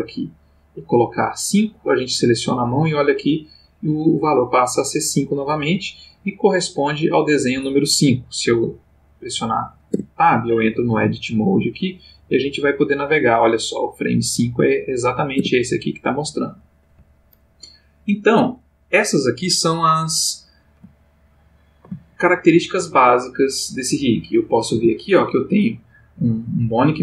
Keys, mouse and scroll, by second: 0.0 click, 0.6 click, 2.1 click, 9.9 Tab, 11.9-13.5 drag, 15.4 Tab, 17.9 click, 21.0-22.9 ctrl+middle drag, 23.5 click, 24.7 g.